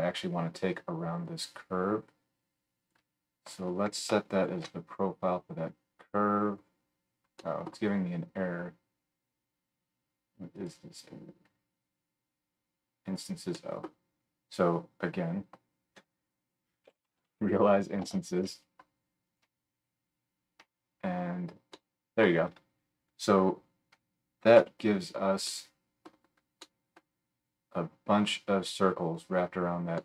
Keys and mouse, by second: 4.5-7.7 alt+shift+right drag, 7.7 click, 8.5-10.5 right drag, 10.5-19.4 middle drag, 16.0 F3, 19.4-30.0 right drag, 24.6 KP_Decimal.